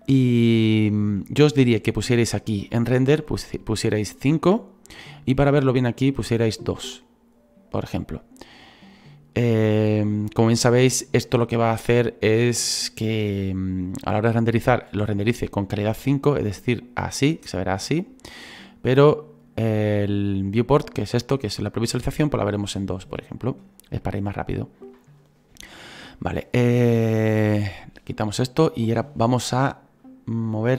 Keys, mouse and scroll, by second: 6.0-8.7 drag, 8.7-16.1 middle drag, 16.1-21.5 drag, 21.5-26.1 middle drag, 26.1 scroll down 2, 27.4 /, 27.9-28.4 scroll down 2, 28.4-30.1 middle drag, 30.1-30.7 drag.